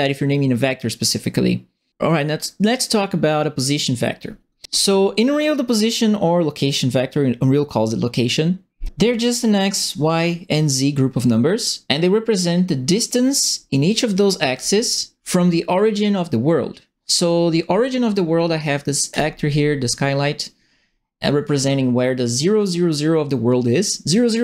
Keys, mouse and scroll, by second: 19.1 right click.